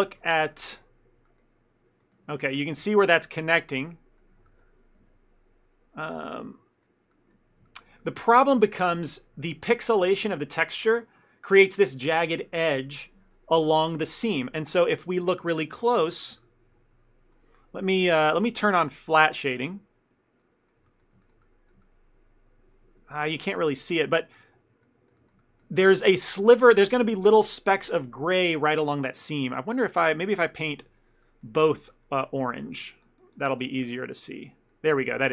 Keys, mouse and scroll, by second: 0.1 shift+middle click, 2.3 ctrl+middle click, 2.9 shift+middle click, 3.2 ctrl+middle click, 4.5 shift+middle click, 5.1 Tab, 6.2 Tab, 6.5 ctrl+middle click, 7.7 shift+middle click, 8.0 ctrl+middle click, 15.1 middle click, 15.5 ctrl+middle click, 15.9 shift+middle click, 16.2 ctrl+middle click, 16.5 middle click, 18.7 click, 20.5 middle click, 20.9 shift+middle click, 21.3 ctrl+middle click, 21.5 middle click, 21.9 ctrl+middle click, 24.3 middle click, 25.3 shift+middle click, 25.5 ctrl+middle click, 25.8 middle click, 30.6 ctrl+middle click, 31.3 middle click, 31.7 ctrl+middle click, 31.9 middle click, 32.4 click, 33.9 middle click, 34.3 ctrl+middle click, 35.0 shift+middle click.